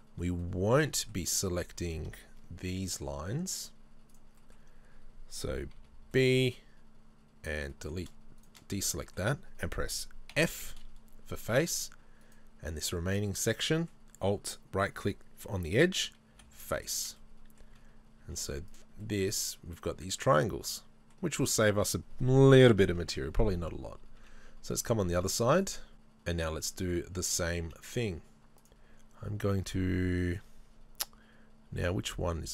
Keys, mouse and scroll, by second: 3.7 click, 4.4-8.4 middle drag, 5.8 b, 8.4 shift+right click, 8.8-10.4 middle drag, 10.4 f, 10.8-12.3 middle drag, 12.3 alt+right click, 12.8 middle click, 16.4 f, 16.7 scroll down 1, 17.0 Tab, 17.7 z, 19.0 middle click, 22.9 KP_3, 23.6 KP_1, 24.2 z, 28.6-29.9 drag, 29.9-30.2 scroll up 2, 30.2-32.5 shift+middle drag, 30.6 scroll up 1.